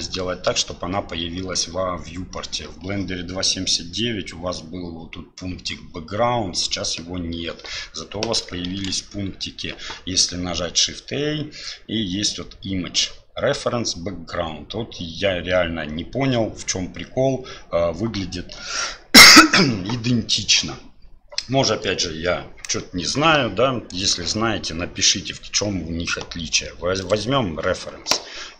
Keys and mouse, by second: 8.7 shift+a.